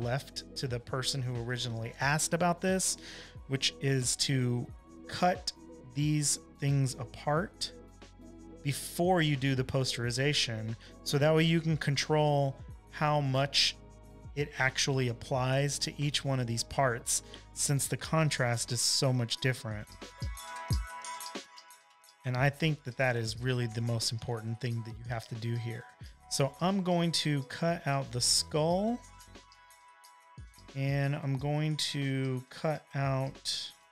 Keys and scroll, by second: 0.0 BackSpace, 0.5 space, 0.7 space, 3.9 shift+l, 25.7 super+j, 27.1 space, 27.6 space, 27.7 space, 31.4 v, 32.5 l.